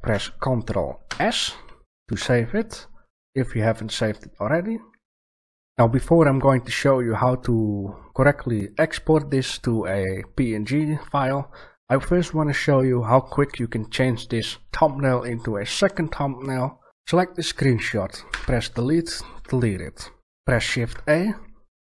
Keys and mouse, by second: 1.0 ctrl+s, 16.9 right click, 18.2 Delete, 20.6 shift+a.